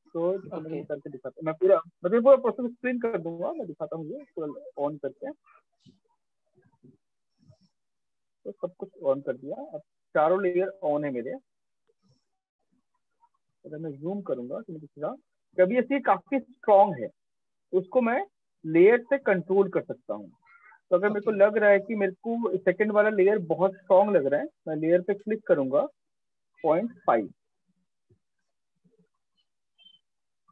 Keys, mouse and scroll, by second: 2.6 click, 4.8 click, 8.2 f, 9.9 alt+click, 11.0 right click, 11.7 click, 13.1 right click, 14.8 click, 16.8 alt+click, 17.5 click, 22.8 click, 24.9 click, 25.9-26.2 typing, 26.7 Return, 29.9 typing.